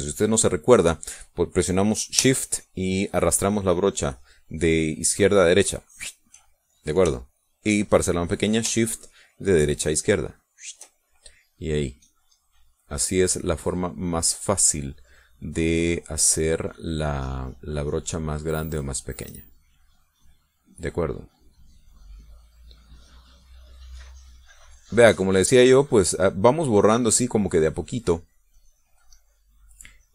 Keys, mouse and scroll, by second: 6.4 shift+click, 10.3-11.6 shift+drag, 12.3-15.7 drag, 16.3-19.3 drag, 20.6-26.9 drag, 26.9 middle click, 27.7-30.1 drag.